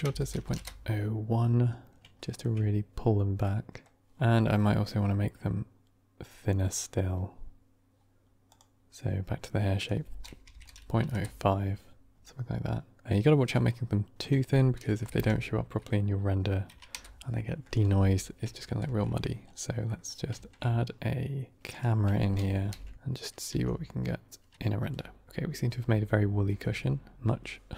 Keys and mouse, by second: 2.1-2.4 shift+middle drag, 3.3 middle click, 8.3 click, 9.7-11.4 drag, 14.1-17.8 drag, 18.5 ctrl+s, 19.8 middle drag, 20.2 shift+a, 22.4 ctrl+alt+KP_0, 22.9 shift+`.